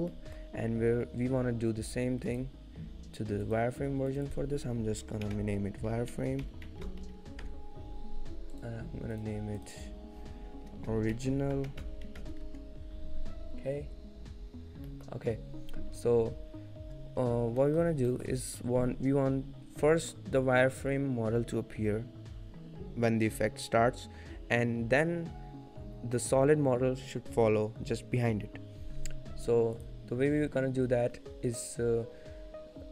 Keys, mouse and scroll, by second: 0.0 shift+middle click, 0.3 middle click, 2.4 click, 3.6 click, 8.8 click, 9.3 click, 14.9 scroll down 1, 15.2 middle click, 17.3-18.4 scroll up 3, 18.4 shift+middle click, 18.4-18.7 scroll down 3, 19.9 middle click, 19.9-20.3 scroll up 1, 21.8 scroll up 1, 22.7-23.0 scroll down 1, 29.9 click.